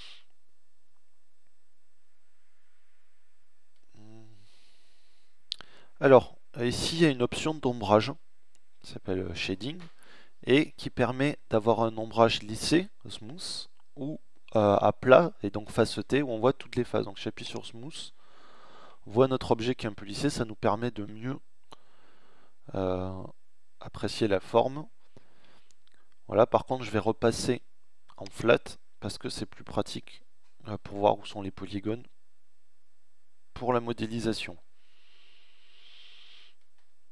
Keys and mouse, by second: 28.2-29.9 middle drag, 35.7 Tab.